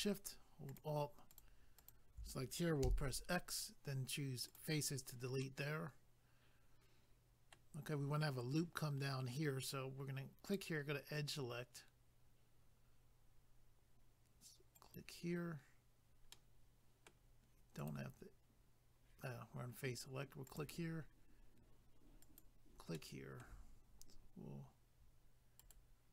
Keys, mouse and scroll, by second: 0.7 alt+click, 0.8 alt+click, 1.3 alt+click, 1.4 alt+click, 1.8 alt+click, 1.9 alt+click, 2.8 x, 4.5 click, 4.5 click, 5.4 middle click, 10.4 click, 10.5 click, 14.7 click, 16.3 middle click, 17.8 click, 17.9 click, 20.5 click, 20.6 click, 22.2 click, 22.4 click, 22.9 middle click, 25.6 ctrl+right click, 25.7 ctrl+right click.